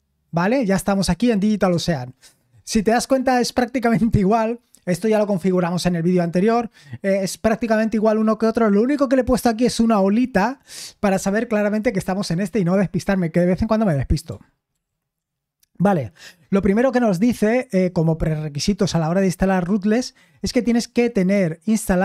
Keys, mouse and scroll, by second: 14.7 ctrl+l.